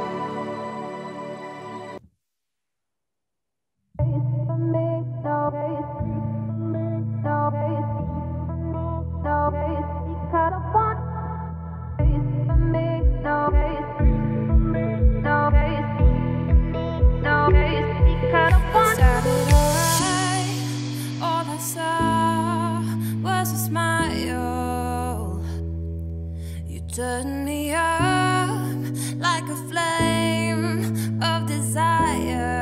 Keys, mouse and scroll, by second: 0.6 g, 4.5 scroll down 2, 4.6-5.6 middle drag, 5.6 click, 5.8-7.0 scroll down 2, 7.0 scroll up 4, 7.2 scroll down 1, 7.5-8.1 middle drag, 8.1-8.8 scroll up 5, 8.8-11.3 middle drag, 11.3-11.7 scroll up 2, 11.7-12.4 scroll down 5, 12.4 ctrl+z, 13.2 `, 13.7-14.2 scroll up 6, 14.5 g, 17.2-18.4 scroll down 11, 17.3 middle drag, 18.4 click, 18.7 scroll down 2, 19.0-19.5 scroll up 4, 19.8 click, 20.0 `, 20.4 scroll down 2, 20.6 middle click, 20.8-21.6 scroll up 5, 21.6-22.2 scroll up 1, 22.2 r, 26.9-27.5 scroll down 10, 27.5 click, 27.7-28.5 scroll up 4, 28.0 middle drag, 28.5-31.4 shift+middle drag, 31.4-31.9 scroll down 2, 31.9-32.6 middle drag.